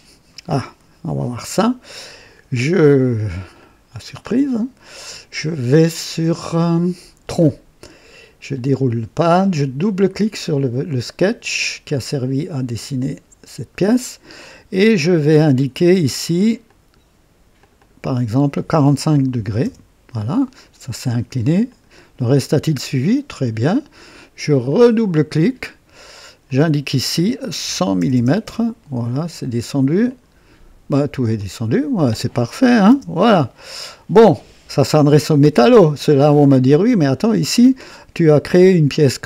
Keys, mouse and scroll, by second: 2.5-3.5 drag, 3.6-4.6 drag, 8.5 click, 12.8 click, 16.7 click, 17.6 click, 19.1 KP_4, 19.3 KP_5, 19.6 KP_Enter, 21.7 click, 24.4 click, 26.5 click, 27.7 KP_1, 27.7 KP_1, 28.0 KP_0, 28.1 KP_0, 28.4 Return, 30.1 click, 31.4-32.5 drag, 32.9 KP_0, 33.6-34.2 right drag.